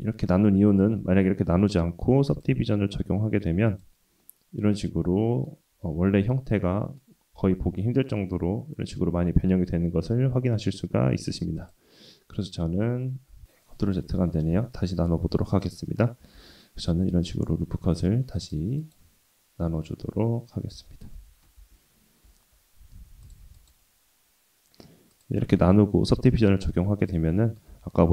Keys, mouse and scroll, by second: 1.0 ctrl+z, 2.3-3.8 drag, 4.2-5.4 middle drag, 5.7-7.0 scroll up 3, 6.2 middle click, 7.4 shift+middle click, 8.0 middle click, 11.6 click, 13.4 ctrl+shift+z, 13.4 Tab, 14.2 Tab, 14.5 Tab, 16.3 ctrl+r, 20.8 Tab, 21.1 Tab, 21.6 ctrl+r, 25.1-26.4 drag, 27.1 middle click, 27.7 Tab.